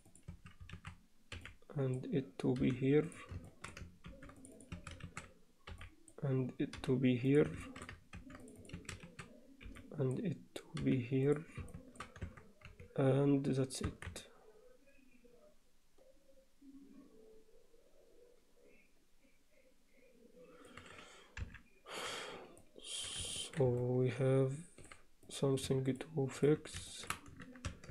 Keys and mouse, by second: 0.4 a, 1.4 b, 2.6 g, 3.5 shift+middle click, 4.1 ctrl+r, 4.8 a, 5.7 b, 6.8 g, 7.7 alt+shift+middle click, 8.2 ctrl+r, 8.8 a, 9.6 b, 10.8 g, 11.8 shift+middle click, 12.3 Tab, 12.7 z, 13.9 Tab, 14.2-20.7 alt+middle drag, 22.6 alt+middle click, 23.4 ctrl+alt+middle click, 23.8-24.9 alt+middle drag, 25.3 click, 25.9 shift+click, 26.9 alt+shift+middle click.